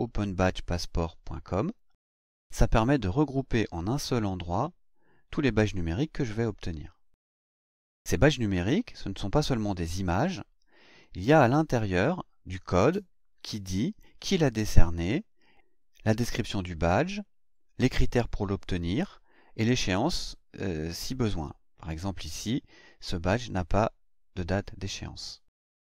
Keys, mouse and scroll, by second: 0.1 click, 9.5 click, 10.8 click, 23.8-24.3 scroll down 4, 24.9-25.7 scroll up 2.